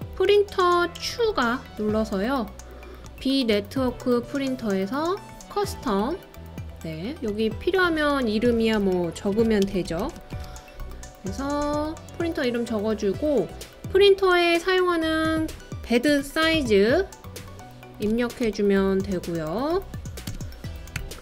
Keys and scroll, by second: 8.8-10.8 typing, 16.1-16.6 typing, 18.0-18.5 typing, 20.3-21.0 typing.